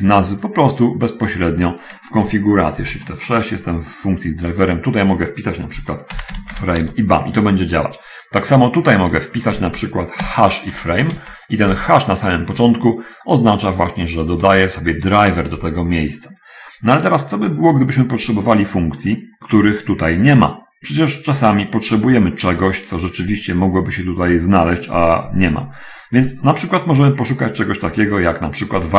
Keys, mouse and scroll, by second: 0.9-2.4 drag, 3.2 shift+F6, 4.7 click, 6.2-7.3 typing, 7.3 Return, 9.1 click, 10.7-12.3 typing, 14.9 BackSpace, 15.2 BackSpace, 15.7 Escape, 19.8-21.2 drag, 22.3-22.7 scroll down 1, 24.2 scroll up 1, 24.9-25.3 scroll up 1, 26.5-27.7 scroll up 1, 27.9 scroll up 1.